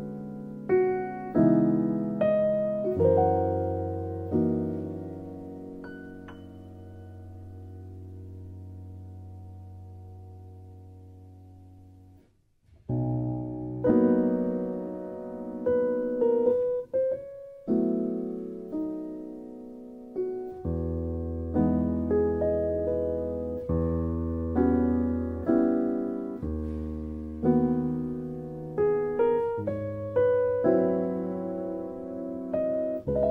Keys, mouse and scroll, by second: 2.5 click, 3.2 KP_3, 4.1 shift+middle click, 4.6 shift+middle click, 5.5 shift+middle click, 6.6-8.0 middle drag, 8.3 KP_1, 11.3 alt+shift+click, 12.7 s, 13.7 s, 14.0 click, 14.2 middle click, 15.8 e, 17.1 ctrl+z, 17.9 e, 18.9-19.7 z, 20.2 z, 20.2 s, 21.1 click, 22.5 middle click, 23.3 Tab, 23.6 middle click, 24.7-25.4 drag, 25.6-26.1 drag, 26.1-26.7 middle drag, 26.9 click, 27.2 KP_3, 27.8 Tab, 28.3 alt+z, 29.6 click, 30.0 Tab, 30.4 alt+z, 30.7 Tab, 31.2 click, 32.0 click.